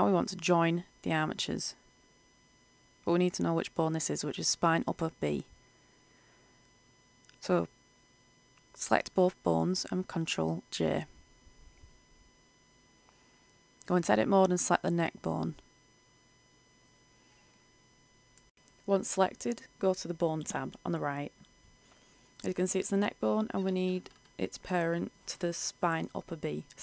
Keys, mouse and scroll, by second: 0.2 right click, 4.5 Tab, 5.6 right click, 8.2 right click, 8.9 shift+right click, 10.5 ctrl+j, 12.1 ctrl+alt+F10, 20.1 click, 24.1-24.6 typing, 26.4 click.